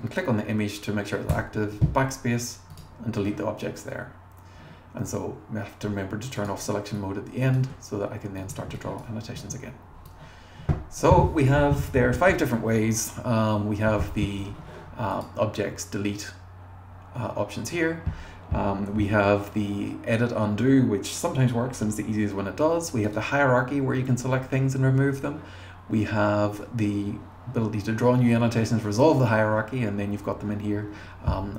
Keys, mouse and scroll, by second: 1.3 BackSpace, 2.7 click, 6.4 click, 6.9 click, 8.4 click, 8.8 click, 9.3 BackSpace, 10.0 click.